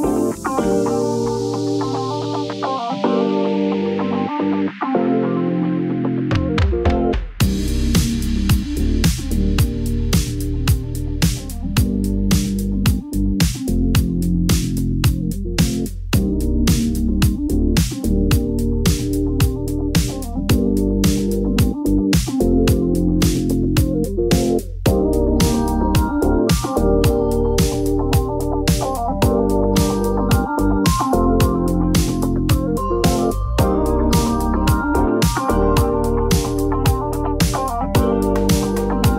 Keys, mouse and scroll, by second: 0.1 click, 0.4-0.8 drag, 1.1 g, 1.2 y, 2.3 click, 2.4 g, 3.0 click, 3.2-4.3 middle drag, 4.3 click, 5.0 shift+click, 5.7 g, 5.9 y, 7.5 click, 8.2 Tab, 9.1-10.7 drag, 11.1 middle click, 11.5-11.9 middle drag, 13.6 click, 14.0 middle click, 22.1-23.6 drag, 28.8 click, 29.3-30.6 drag, 31.0 click, 32.1 middle click, 33.0 Tab, 35.8 ctrl+KP_Add, 36.0 ctrl+KP_Add, 36.3 ctrl+KP_Add, 37.5 shift+click, 38.0-38.7 ctrl+KP_Add.